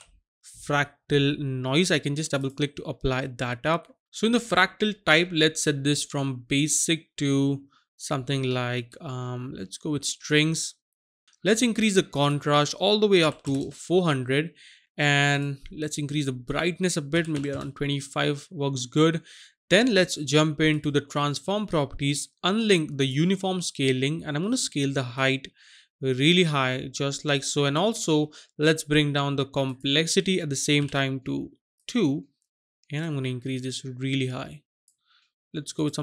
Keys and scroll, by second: 13.3 KP_4, 13.4 KP_0, 13.6 KP_0, 17.3 KP_5, 17.5 Return, 30.8 KP_2.